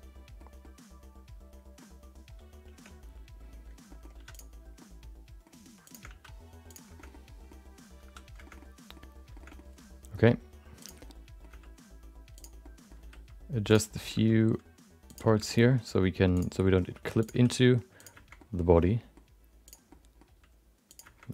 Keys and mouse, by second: 0.7-1.8 middle drag, 2.7 Tab, 3.8 middle click, 4.1 3, 4.3 click, 4.8 middle click, 5.8 shift+click, 6.0 x, 6.9 shift+middle click, 7.1 middle click, 8.4 shift+middle click, 8.6 middle click, 9.3 shift+middle click, 9.5 middle click, 10.1 middle click, 10.8 click, 11.0 middle click, 11.5 g, 12.7 middle click, 13.0 r, 14.0 middle click, 14.1 g, 15.5 middle click, 16.3 click, 16.5 middle click, 16.9 g, 17.3 r, 18.3 middle click, 18.8 middle click, 19.6 click, 19.9 middle click, 20.3 g.